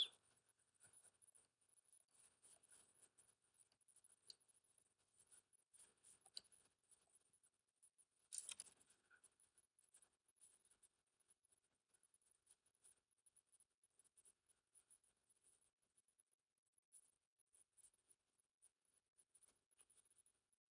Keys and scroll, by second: 9.0 ctrl+z.